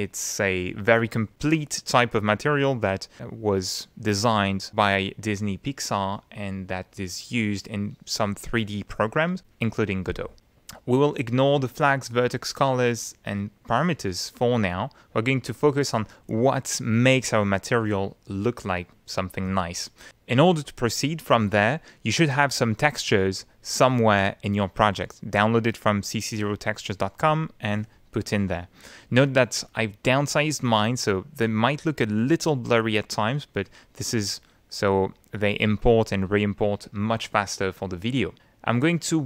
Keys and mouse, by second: 6.7 click, 7.3 click, 28.4 click, 29.5 click, 33.8 click, 38.9 click.